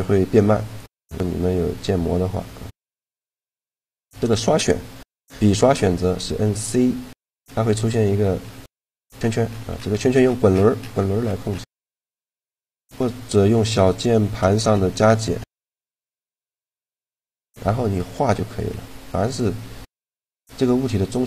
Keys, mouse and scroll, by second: 5.3-6.9 middle drag, 6.9 c.